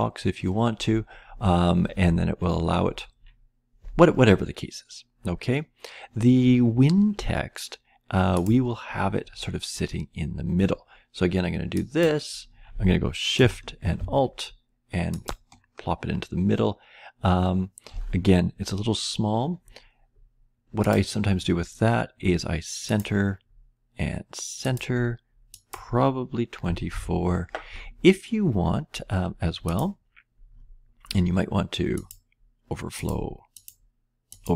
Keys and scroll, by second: 26.5 typing.